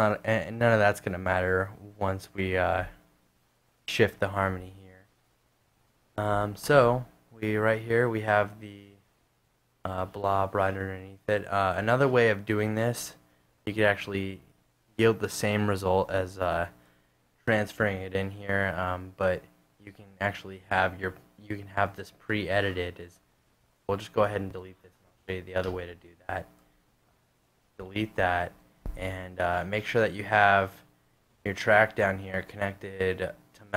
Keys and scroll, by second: 4.6 super+Tab, 27.7 fn+Delete, 28.1 BackSpace, 28.5 super+fn+Delete, 28.6 super+fn+Tab.